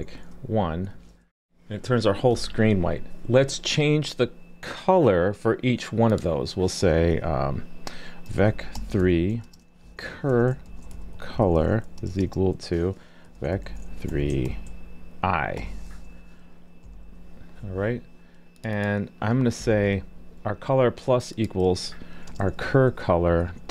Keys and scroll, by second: 0.9 super+s, 19.6 super+c.